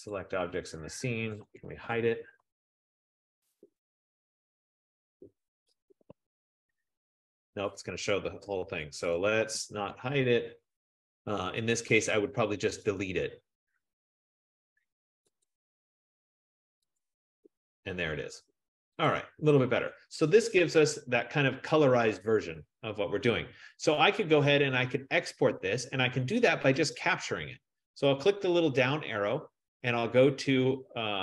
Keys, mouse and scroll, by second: 0.2 click, 1.4-3.3 typing, 5.0 click, 5.8-6.9 typing, 9.8 ctrl+z, 13.1 right click, 15.6 click, 17.1 click, 19.1 click, 24.2 click, 27.1-31.2 drag.